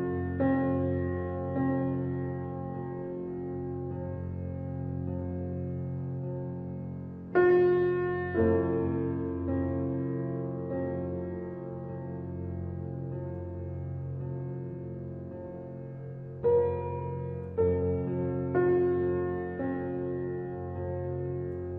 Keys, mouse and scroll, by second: 1.9 alt+click, 3.1 ctrl+b, 8.0 ctrl+z, 10.1 alt+click, 11.8 e, 15.9-18.6 middle drag, 15.9 scroll up 3, 18.6 ctrl+r.